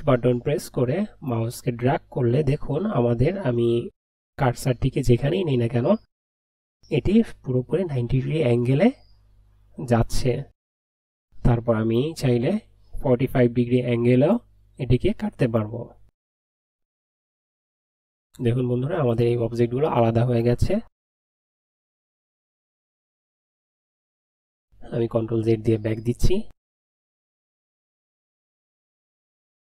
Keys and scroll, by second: 25.2 ctrl+z.